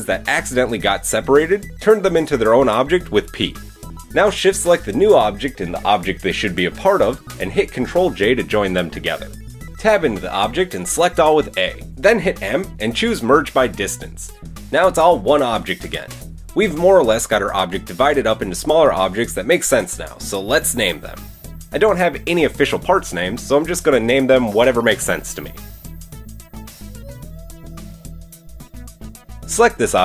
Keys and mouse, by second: 2.0 p, 3.0 Tab, 3.5-7.0 drag, 7.2-12.1 shift+drag, 8.4 ctrl+j, 10.6 Tab, 11.1 a, 12.1 m, 13.7-14.5 middle drag, 14.1 Tab, 14.8-19.5 middle drag, 19.5-22.6 drag, 22.1 BackSpace, 22.8 middle click, 23.2 click, 23.2 BackSpace, 23.4 t, 25.9 BackSpace, 27.1 click, 27.6 BackSpace, 29.9 drag, 29.9 middle drag, 29.9 right drag, 29.9 Tab.